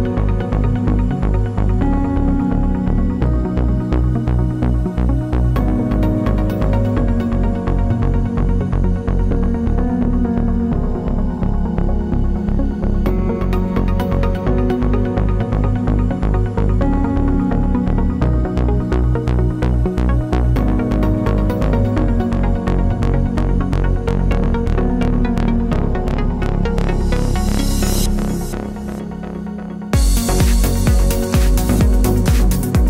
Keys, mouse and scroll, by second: 0.6 scroll down 1, 0.9 scroll up 1, 1.6 click, 4.3-13.5 middle drag, 5.2 scroll up 1, 6.3 shift+a, 7.9 scroll down 1, 9.1 g, 12.8 g, 13.5 click, 13.6-17.4 middle drag, 14.2-15.0 scroll down 1, 15.7 KP_7, 16.7 g, 17.4 click, 17.5-19.2 middle drag, 18.8 g, 19.2 click, 20.0 scroll down 1, 21.5 click, 21.7 click, 22.4-31.2 drag, 29.7-31.2 scroll up 1, 31.4 click, 31.8-32.8 drag.